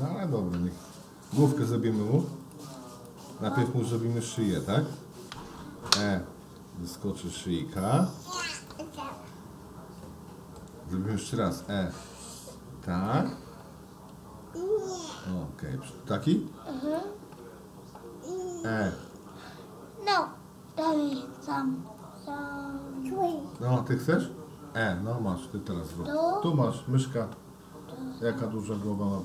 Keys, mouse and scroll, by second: 3.0 shift+click, 3.4 shift+click, 4.4 middle click, 5.7 e, 8.7-10.6 middle drag, 11.5 e, 14.0 s, 18.9 e, 23.3 middle click, 24.9 e.